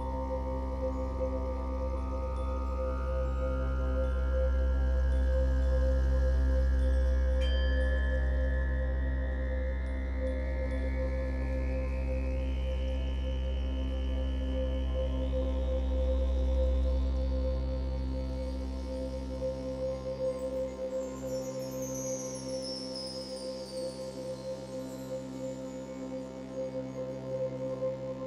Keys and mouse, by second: 0.7-5.5 drag, 5.3-7.7 typing, 9.4-17.0 drag, 12.2-13.8 typing, 14.9-17.0 typing, 19.3-28.2 drag.